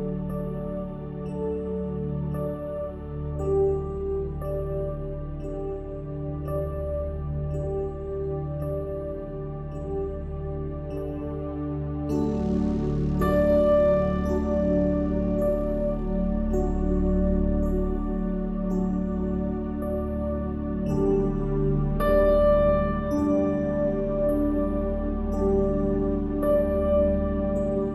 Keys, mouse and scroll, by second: 0.9-2.1 middle drag, 2.3 middle click, 2.9 KP_1, 3.8 middle click, 4.6 Tab, 9.1-10.4 middle drag, 10.4 ctrl+r, 11.9 ctrl+r, 13.6 click, 13.8 ctrl+KP_Add, 15.4 s, 17.8 click, 18.5 s, 19.3 s, 22.8-24.4 drag, 24.1 e, 25.0 ctrl+r, 25.7 ctrl+r, 26.5 ctrl+r, 26.9 ctrl+r.